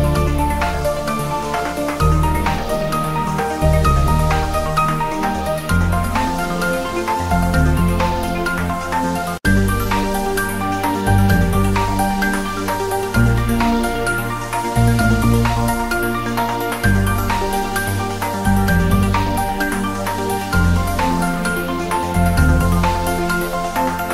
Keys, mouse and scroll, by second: 0.6 click, 0.9 shift+z, 1.0 click, 1.2 scroll up 1, 1.9-3.6 drag, 3.6-4.1 scroll down 1, 4.1-5.7 drag, 5.7-6.3 scroll down 1, 9.0-9.3 scroll down 1, 10.8-11.3 scroll up 1, 11.3-15.0 drag, 15.4-15.7 scroll up 1, 15.7 click, 16.5 s, 17.0 click, 17.2 g, 17.6 x, 17.9 Left, 18.8 click, 19.4 g, 19.6 Left, 19.9 Return, 20.3-21.0 scroll up 2, 21.1 click.